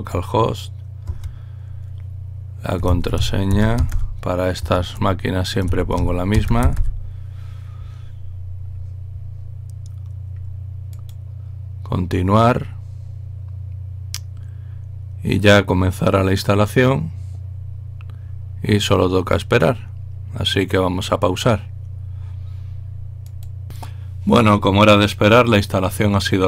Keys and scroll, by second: 0.0 Tab, 1.1 Tab, 2.6-4.6 typing, 6.0-7.5 typing.